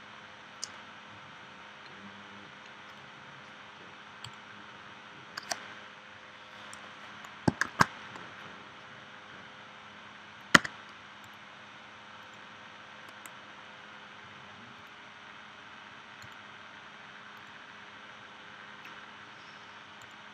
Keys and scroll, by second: 7.6 shift+w, 10.5 v.